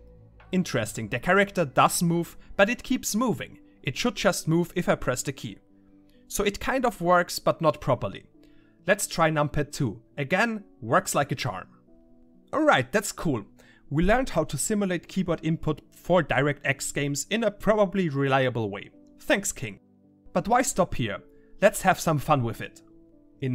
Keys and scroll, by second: 0.0-1.6 typing, 6.2-12.5 typing.